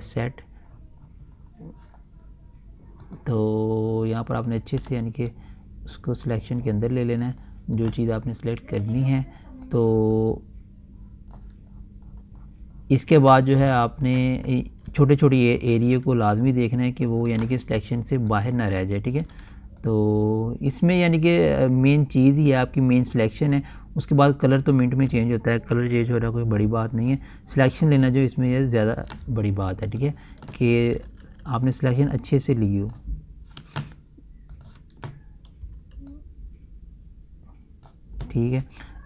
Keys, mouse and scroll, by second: 0.3-0.6 scroll down 1, 3.5 click, 4.0 scroll up 1, 5.8-12.2 drag, 12.2-12.5 scroll down 1, 14.3 ctrl+alt+scroll up 1, 15.4-16.4 typing, 16.6-18.8 drag, 19.7 typing, 20.3-30.5 drag, 31.3-31.8 typing, 32.2-35.0 drag, 36.0 ], 36.6-39.0 drag.